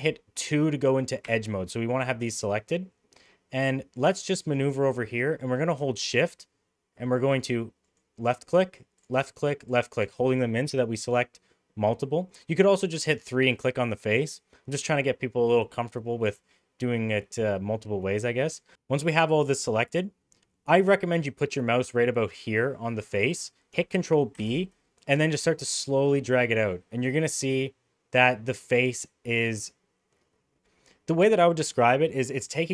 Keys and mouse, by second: 1.2 2, 2.9-5.1 middle drag, 7.8 shift+click, 9.6 shift+click, 12.0 middle click, 16.5 middle click, 18.7 Tab, 24.3 ctrl+b.